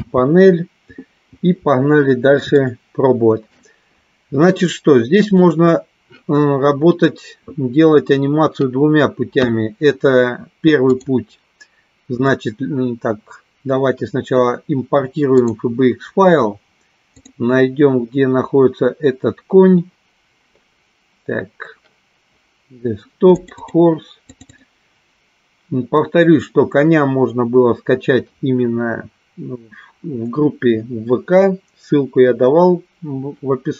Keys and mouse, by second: 2.6 shift+middle click, 5.4 click, 11.1-15.8 drag.